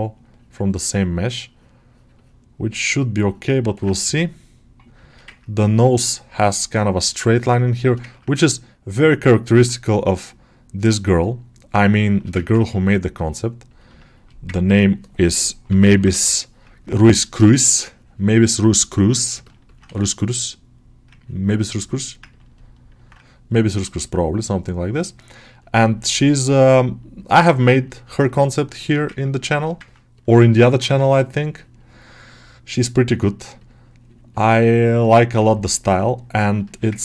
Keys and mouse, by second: 0.8 ctrl+click, 1.7-3.5 ctrl+drag, 3.5 ctrl+middle click, 3.9 g, 4.9 shift+middle click, 5.2 ctrl+middle click, 5.8 3, 6.2-7.8 middle drag, 8.0 ctrl+middle click, 8.4-11.7 middle drag, 11.8 alt+shift+middle click, 12.3 ctrl+middle click, 13.8 shift+middle click, 14.4 ctrl+alt+middle click, 15.7 [, 18.4 middle click, 19.3 ctrl+middle click, 21.3 ctrl+click, 21.8 middle click, 22.2 ctrl+middle click, 24.4 ctrl+click, 25.2-27.1 ctrl+drag, 27.1 middle click, 27.5 shift+right click, 28.0 shift+middle click, 28.3 middle click, 29.7 ctrl+alt+middle click, 30.0 middle click, 30.4 ctrl+middle click, 31.6-34.2 ctrl+drag, 34.8-36.5 ctrl+drag, 36.5 shift+middle click.